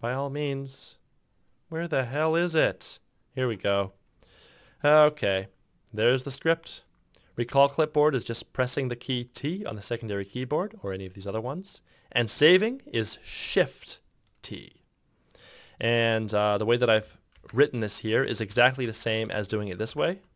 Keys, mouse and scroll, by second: 17.5 ctrl+c, 18.6 ctrl+v, 19.1 ctrl+v, 19.5 ctrl+v, 20.0 ctrl+v.